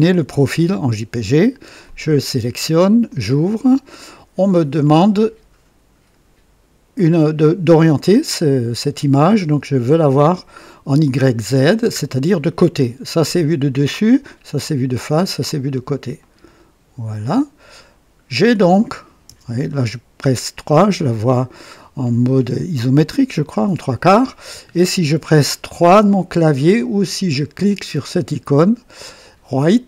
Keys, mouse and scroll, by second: 1.8 click, 3.0 click, 10.2 click, 16.1 click, 18.3 scroll down 2, 19.3 KP_0, 20.3-21.7 right drag.